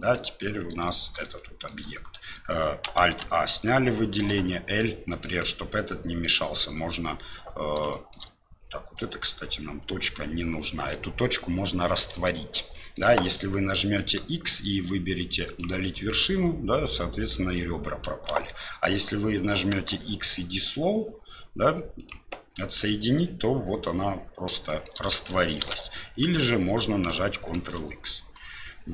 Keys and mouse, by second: 1.3 shift+middle click, 3.0 alt+a, 4.2 l, 7.9 shift+middle click, 8.9 right click, 12.1 ctrl+shift+middle click, 12.7 shift+middle click, 14.0 x, 18.3 ctrl+z, 19.7 x, 24.7 shift+middle click, 25.6 ctrl+z, 27.5 ctrl+x, 28.6-28.9 middle drag.